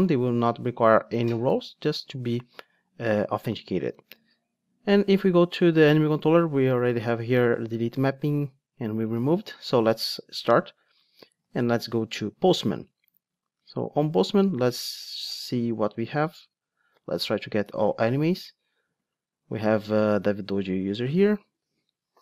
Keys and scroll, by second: 10.4 ctrl+d.